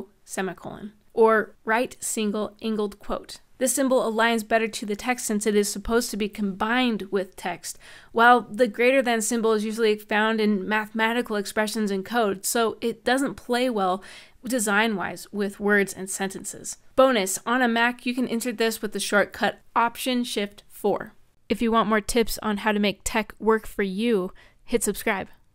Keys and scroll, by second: 0.0-1.5 typing, 17.5 alt+shift+4.